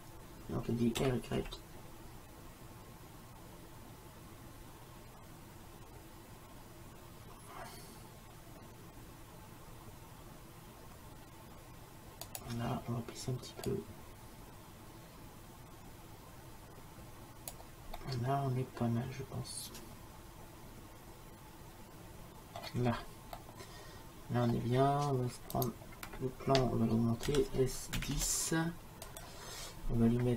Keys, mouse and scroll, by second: 1.0 r, 13.7-15.6 drag, 18.0-19.9 middle drag, 22.9-25.6 middle drag, 25.6-27.3 right drag, 27.3 s.